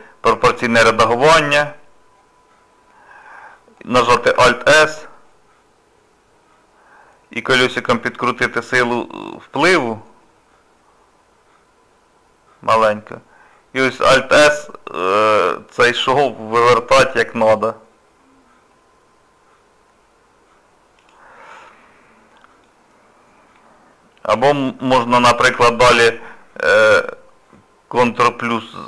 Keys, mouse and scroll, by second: 4.4 alt+s, 21.5 middle click, 23.0 scroll up 2, 23.6 middle click, 25.4 ctrl+KP_Add, 28.1 scroll down 1, 28.3 scroll up 1, 28.5 middle click.